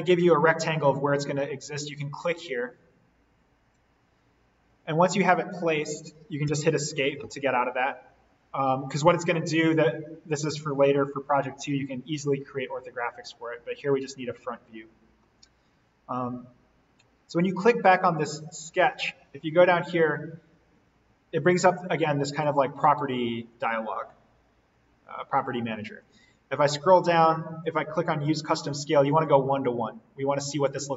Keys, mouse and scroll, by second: 1.7 click, 6.4 Escape, 13.8 click, 15.0-16.6 scroll down 1, 18.7-22.2 drag, 22.4-26.0 drag, 26.0-27.6 drag, 30.4-30.9 scroll up 1.